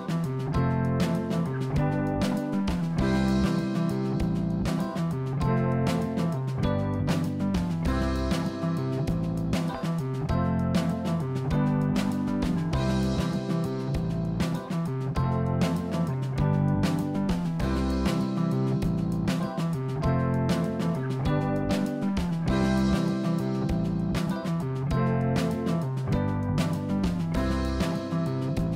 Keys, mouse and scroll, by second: 2.4 click, 3.4 click, 3.9 click, 4.2-5.1 scroll up 4, 5.1-6.4 scroll up 3, 6.4-7.6 scroll down 4, 7.6 click, 9.8 click, 11.5 click, 11.9-13.6 drag, 22.0 click, 25.2 click, 26.1 g, 28.7 click.